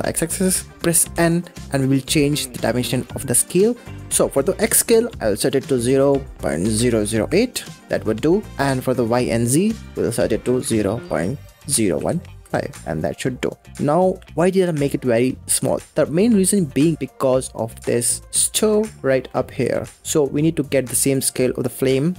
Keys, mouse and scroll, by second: 1.0 n, 2.5-2.9 scroll up 2, 2.9 middle click, 4.4-6.9 drag, 6.9 0, 8.8-11.9 drag, 13.4-14.2 scroll up 14, 14.2-14.7 shift+middle drag, 14.7-15.0 scroll up 3, 15.0-16.9 middle drag, 16.9 click, 17.4-18.2 scroll down 6, 18.2 g, 19.1-19.8 shift+middle drag, 19.8 g.